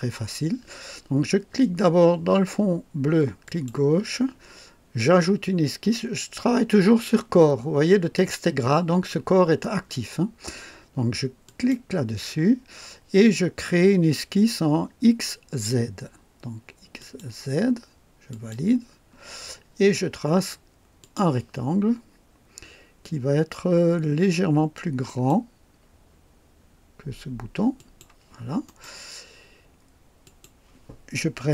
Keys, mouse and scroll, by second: 3.4 click, 11.4 click, 17.0 click, 18.3 click, 21.0 click, 25.0 click, 27.7 click, 28.6 right click, 30.2 click.